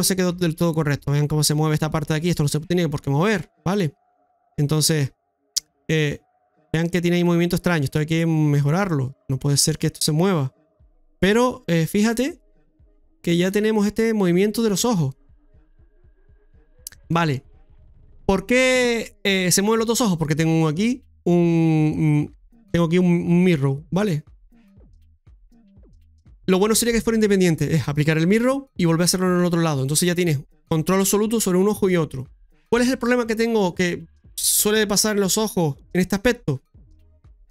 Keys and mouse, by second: 5.0-7.8 drag, 9.7-16.4 drag, 17.0 middle click, 20.6 click, 22.5-24.7 drag, 25.8 middle click, 29.9 middle click, 37.4 shift+middle click.